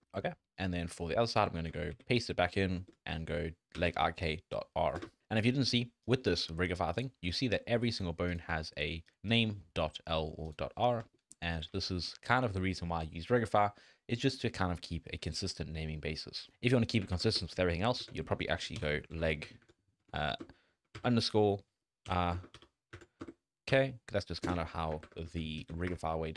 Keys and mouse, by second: 1.4 F2, 6.4 shift+middle click, 7.3 shift+middle click, 8.6 shift+middle click, 9.5 shift+middle click, 11.0 middle click, 11.1 shift+middle click, 11.4 middle click, 11.9 shift+click, 12.5 shift+click, 14.5 shift+click, 14.8 click, 15.2 shift+click, 16.5-24.4 drag, 25.1 F2.